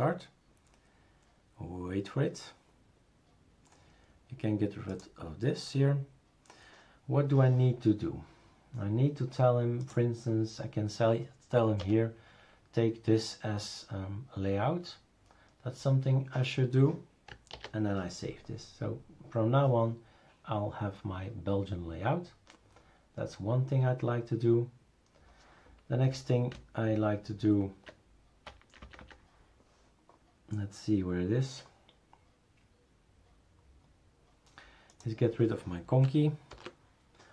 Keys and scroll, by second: 11.8 BackSpace, 17.5 ctrl+s, 26.5 Down, 27.1-27.9 Down, 28.5 Down, 28.6 Down, 28.8 Down, 29.0 Down, 36.5 #.